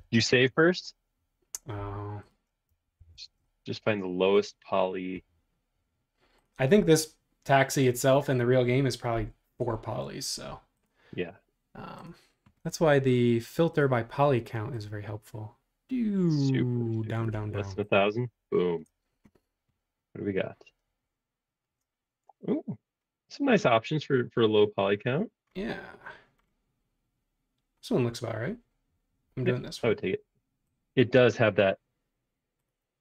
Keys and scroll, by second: 0.0-0.4 typing, 3.0 super+s.